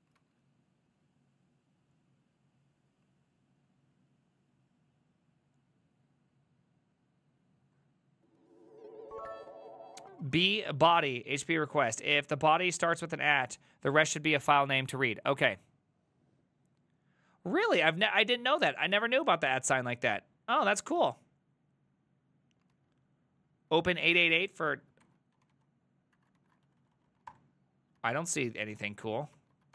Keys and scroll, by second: 0.3 alt++, 22.8 alt+{, 23.8 alt+[, 25.0 ctrl+t, 25.2-27.8 typing, 26.2 Right, 26.4 ctrl+shift+Left, 28.0 alt+{, 28.6 Up, 29.1 Return, 29.4 alt+[, 29.4 typing.